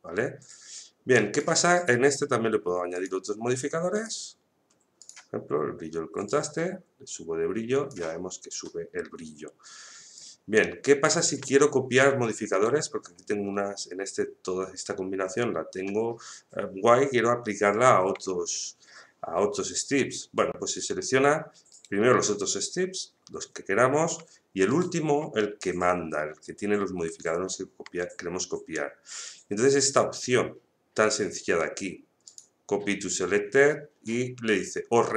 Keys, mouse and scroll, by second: 1.7 right click, 2.9-10.1 drag, 10.1-11.5 drag, 11.5 shift+middle click, 12.5 right click, 21.7 right click, 32.2 click.